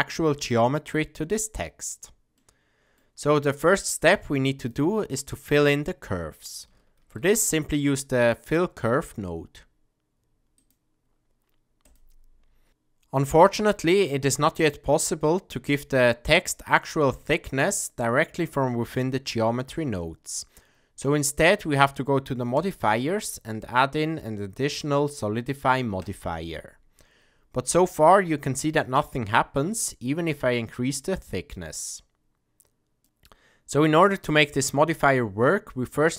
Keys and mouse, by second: 2.5 middle click, 3.5-4.7 drag, 7.0 shift+a, 22.5-26.1 drag, 29.8-33.0 drag.